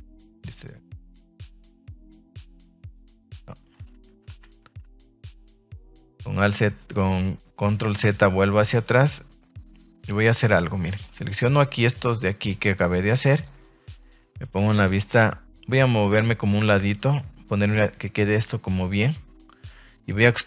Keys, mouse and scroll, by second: 0.8 a, 1.4-3.0 middle drag, 3.2 ctrl+z, 3.4 ctrl+z, 3.5 ctrl+z, 6.4 middle click, 8.6 a, 8.9 middle click, 10.3 click, 11.0 right click, 11.2 shift+right click, 11.5 shift+right click, 12.0 shift+right click, 12.6 shift+right click, 13.0 shift+right click, 13.2 shift+right click, 13.8 middle click, 14.5 KP_3, 15.3 middle click, 15.7 shift+middle click, 16.0-17.4 middle drag.